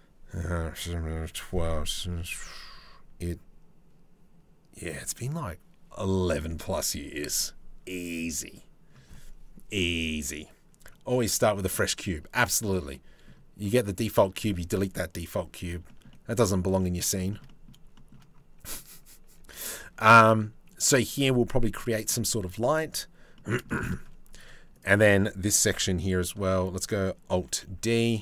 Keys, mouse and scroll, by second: 11.0 middle click, 12.2 shift+middle click, 12.9 middle click, 15.5 shift+middle click, 15.7 middle click, 16.4 middle click, 16.9 shift+middle click, 17.1 middle click, 17.6 shift+middle click, 18.9 Tab, 19.3 Tab, 21.4 middle click, 23.0 middle click, 24.0 middle click, 25.3 KP_7, 27.1 alt+d.